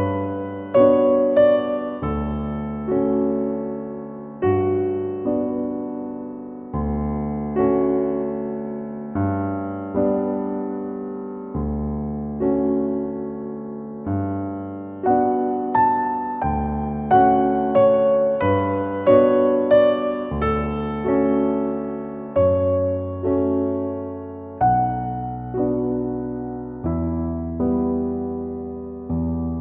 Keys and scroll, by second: 11.6 shift+Up, 12.1 Return.